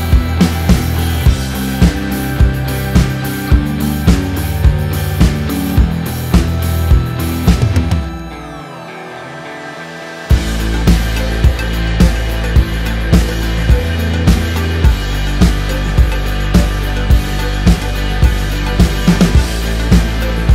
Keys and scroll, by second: 2.7 space, 8.2 ctrl+t, 15.7 Return, 16.2 ctrl+=, 19.4 ctrl+-.